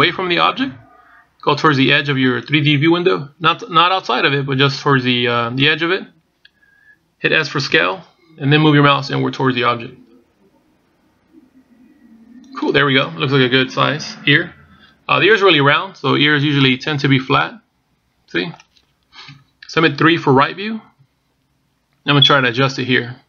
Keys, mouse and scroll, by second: 8.7 s, 17.4 middle click, 20.0 KP_1, 21.6 KP_3.